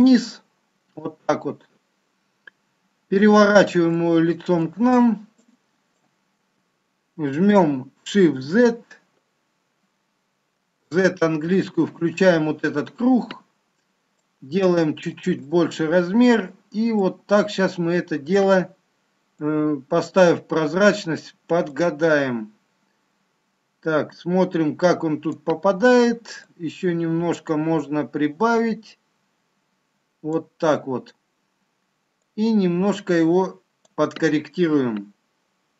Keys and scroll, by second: 8.1 shift+z, 10.6 z.